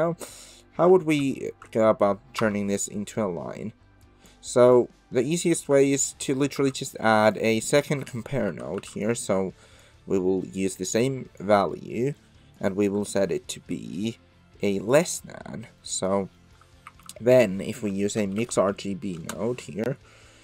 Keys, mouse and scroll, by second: 0.1 middle click, 0.8 Tab, 1.4 ctrl+shift+click, 2.4 Tab, 2.9 middle click, 3.0 click, 3.1 middle click, 4.2 click, 4.7 click, 6.5 shift+a, 7.3 click, 7.6 middle click, 8.5 ctrl+c, 8.8 ctrl+v, 9.0 click, 10.8-11.4 drag, 11.8 middle click, 12.6-15.1 drag, 15.9 middle click, 16.5 middle click, 16.9 shift+a.